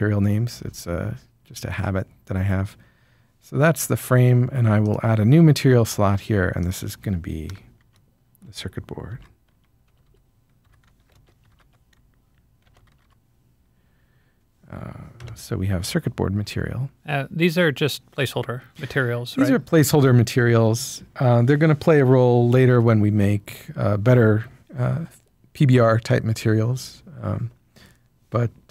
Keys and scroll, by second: 7.7-13.1 typing.